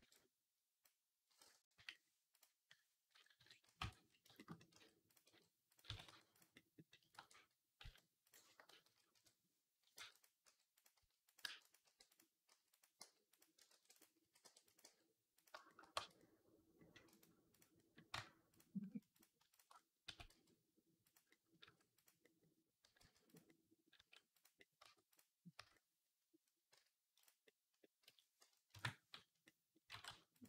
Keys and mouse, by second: 1.6 /, 2.2 click, 3.2 KP_3, 3.6 Tab, 4.6 r, 5.1 g, 5.7-12.3 drag, 5.7 s, 7.0 e, 8.7-12.8 typing, 13.5 ctrl+r, 14.0 s, 14.3 middle click, 14.7 g, 15.3-16.9 shift+middle drag, 15.8 Tab, 16.9-30.4 right drag, 18.0 Tab, 19.0 click, 19.4 alt+shift+click, 19.9 s, 21.5 s, 22.7 g, 23.8 s, 24.6 Tab, 25.0-27.1 drag, 25.0-27.1 middle drag, 25.4 Tab, 26.6 z, 27.9 z, 28.5 ctrl+KP_Add, 29.7 r.